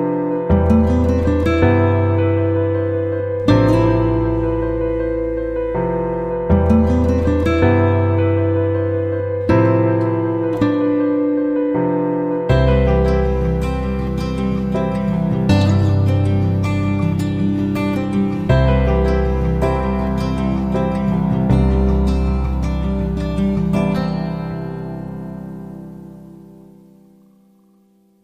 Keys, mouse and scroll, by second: 0.0 F9, 0.7-2.0 drag, 4.2-6.2 scroll up 1, 6.2 click, 9.7 F5.